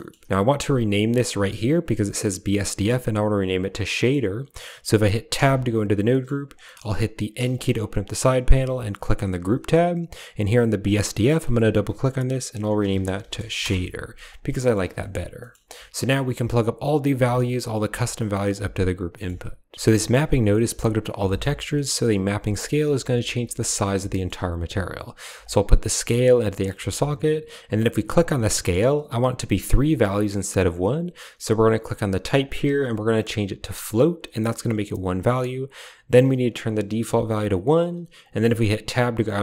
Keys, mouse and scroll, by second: 0.8 drag, 1.2 click, 3.2 click, 3.8 click, 4.4 click, 5.2 Tab, 6.0 click, 6.5 drag, 7.2 n, 9.3-9.7 drag, 10.7-13.5 drag, 14.5 middle click, 14.7 a, 14.8 middle click, 15.3 middle click, 15.9 click, 16.2 g, 18.2 g, 19.0 click, 19.9 click, 20.4 click, 21.1 click, 21.6 click, 22.4 click, 24.0 drag, 25.3-26.3 drag, 26.5 click, 28.0 click, 32.2-34.0 drag, 36.5-37.7 drag, 38.2 middle click, 38.8 Tab.